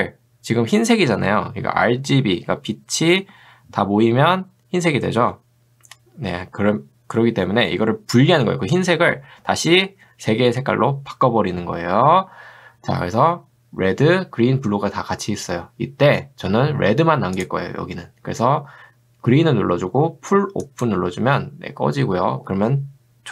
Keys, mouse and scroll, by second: 17.4 click, 20.6 click.